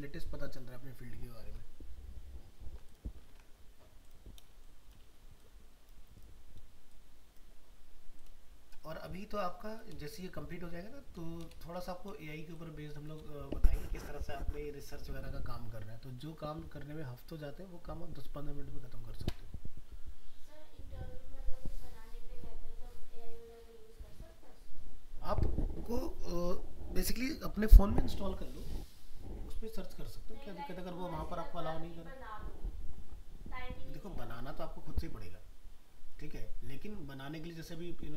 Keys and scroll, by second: 3.4 alt+Tab.